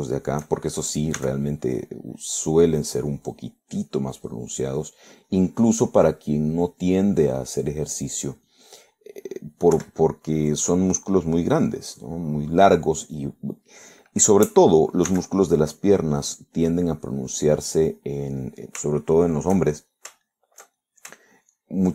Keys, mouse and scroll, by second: 0.1 click, 1.0 shift+middle click, 2.2 s, 2.8 click, 3.8 click, 4.3 click, 4.8 click, 5.3 click, 5.9 click, 6.4 click, 6.8 click, 7.9 click, 10.8 3, 11.6 click, 12.1 click, 12.7 click, 13.1 click, 13.9 click, 16.2 s, 16.6 click, 17.3 click, 19.5 middle click, 20.8 shift+middle click, 21.8 shift+middle click.